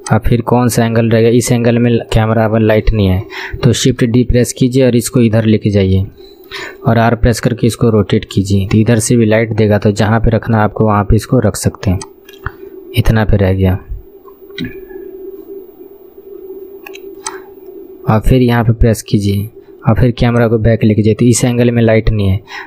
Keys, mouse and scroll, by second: 0.1-3.1 drag, 4.1 shift+d, 5.1-6.3 drag, 6.3 shift+middle click, 7.1 r, 14.7 r, 18.3 KP_7, 20.4-22.6 drag.